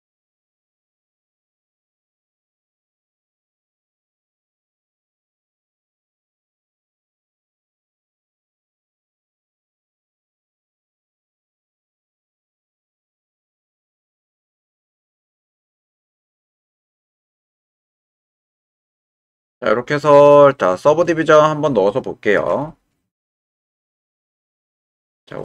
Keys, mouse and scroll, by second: 0.8-2.1 middle drag, 2.9 click, 3.3-4.6 middle drag, 5.5-6.5 middle drag, 7.2 click, 8.5 g, 8.6 x, 9.6 click, 10.2 click, 10.7 g, 10.7 x, 12.1 click, 13.5 middle click, 14.6 middle click, 14.7 click, 15.6 shift+middle click, 17.2-19.6 middle drag, 19.6 click, 20.1 middle click.